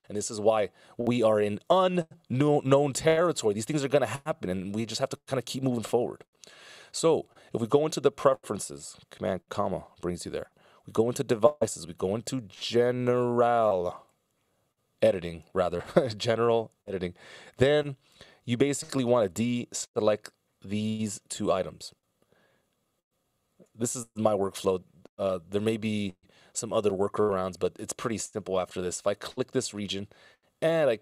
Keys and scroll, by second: 9.7 super+,, 21.5 ctrl+alt+super+m.